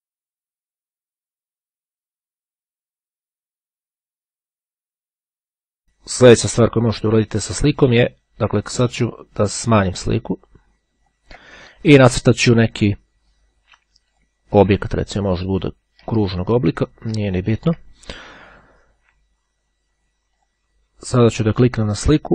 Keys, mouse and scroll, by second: 2.3 click, 4.8 click, 9.9-11.8 ctrl+drag, 14.3 click, 15.7-18.1 ctrl+drag, 20.0-21.1 drag, 21.4 click.